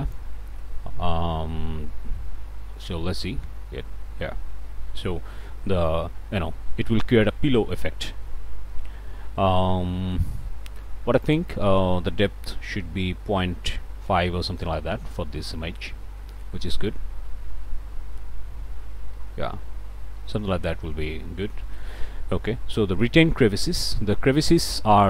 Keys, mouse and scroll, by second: 4.3-4.6 scroll down 1, 5.1 scroll down 1, 9.0-9.5 scroll down 2, 9.5 scroll up 1, 9.5 scroll down 1, 10.0 middle click, 11.2 click, 13.4 ., 13.9 5, 14.3 Return, 15.0 ., 19.5 middle click, 22.6-23.3 scroll down 2, 23.6-23.9 scroll up 1, 24.3 scroll up 1, 24.3 middle click, 24.4 click.